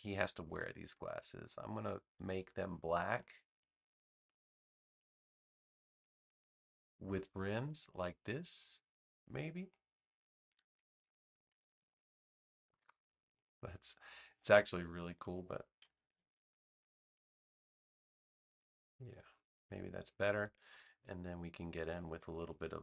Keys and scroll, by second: 11.4 super+=, 15.9 super+z.